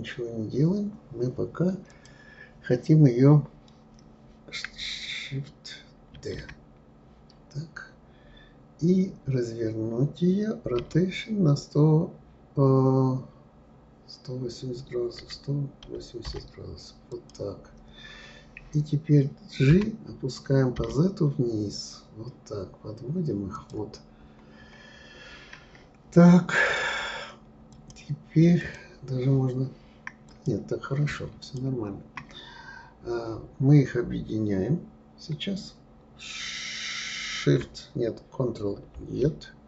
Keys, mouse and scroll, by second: 0.6 scroll down 3, 1.9 click, 6.1 shift+d, 19.7 g, 24.1-26.4 scroll up 7, 27.7 click, 28.6 click, 30.3 click, 31.4 shift+click, 38.9 ctrl+j.